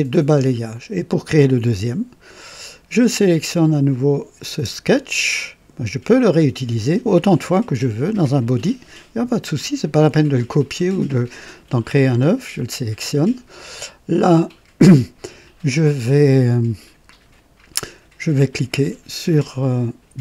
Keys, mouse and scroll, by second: 2.3 click, 3.6 click, 4.5 space.